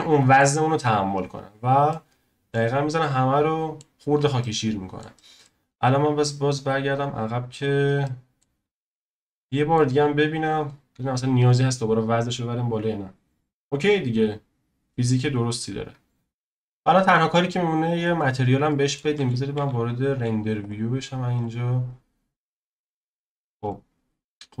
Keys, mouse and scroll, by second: 6.3-8.0 drag, 8.0-8.6 shift+middle drag, 8.6-9.0 scroll up 1, 9.0 click, 9.4-10.5 shift+middle drag, 10.5-13.6 drag, 16.2-16.5 scroll down 1, 16.5 middle click, 16.7 z, 18.7-19.6 shift+middle drag, 19.6 z, 20.1 z, 21.3-24.2 drag, 24.2-24.6 scroll up 2.